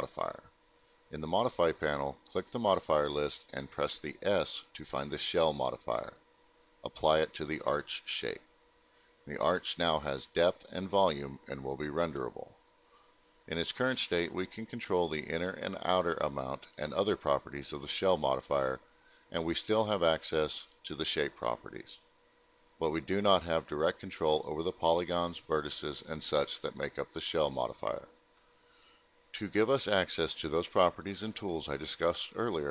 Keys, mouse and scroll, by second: 0.2 click, 4.8 click, 5.8 alt+middle click, 6.4 alt+middle click, 8.6 click, 16.6 click, 19.4 click, 21.2 click, 22.8 click, 23.5 click, 24.7 click, 26.2 click, 26.8 alt+middle click, 29.1 middle click, 30.8 click, 31.2 click, 31.9 e.